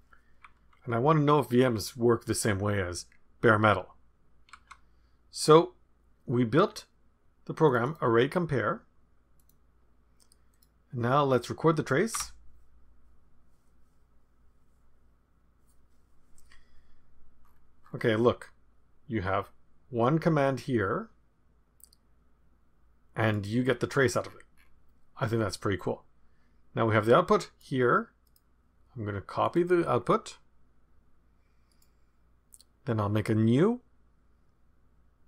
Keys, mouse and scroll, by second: 0.3 Up, 0.6 Up, 1.8 Up, 4.6 Up, 7.6 click, 9.3 click, 10.5 click, 12.1 Return, 17.4 scroll up 2, 17.6 scroll down 2, 17.8-19.0 scroll up 2, 19.4-23.6 drag, 23.6-24.4 scroll down 1, 24.4-25.2 scroll down 1, 25.7-28.0 drag, 28.2 right click, 29.4 click, 31.7 right click.